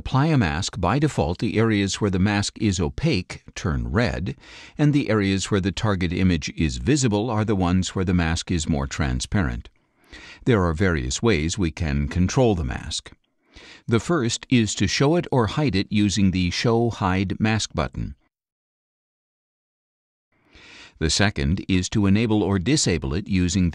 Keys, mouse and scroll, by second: 1.8 click, 3.5-5.8 drag, 6.7-9.9 drag, 16.0 click, 17.0 click, 18.1 click, 19.4 click.